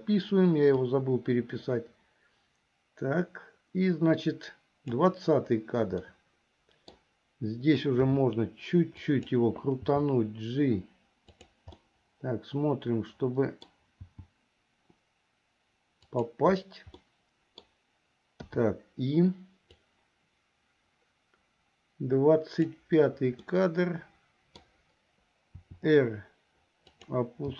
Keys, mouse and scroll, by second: 1.0-5.2 drag, 6.1-7.2 middle drag, 8.2 r, 10.0 g, 12.0-14.0 middle drag, 14.2 g, 17.2 middle click, 18.7 i, 20.0-23.0 drag, 23.7-24.9 middle drag, 25.7 r.